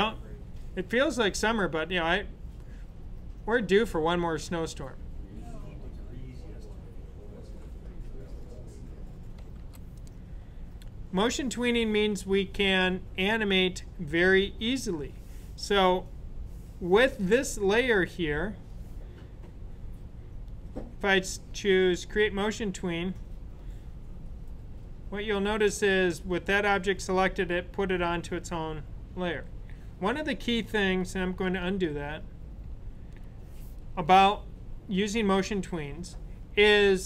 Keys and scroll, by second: 31.4 super+z, 32.2 super+z.